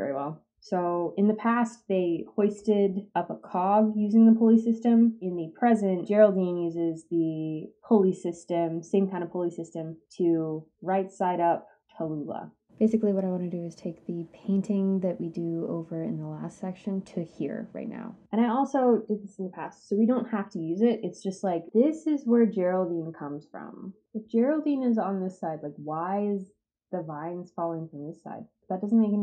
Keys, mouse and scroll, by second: 16.1 scroll up 2.